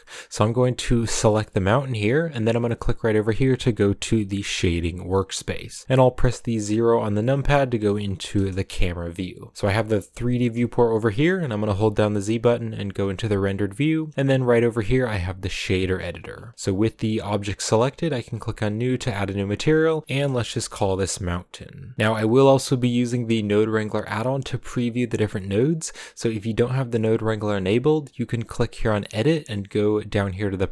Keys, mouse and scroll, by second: 0.4-4.5 right drag, 4.5-7.1 drag, 7.1 KP_2, 8.3 KP_0, 13.2 z, 14.9-16.2 drag, 16.2-17.2 scroll up 1, 17.2-19.1 scroll up 1, 19.1-21.9 drag.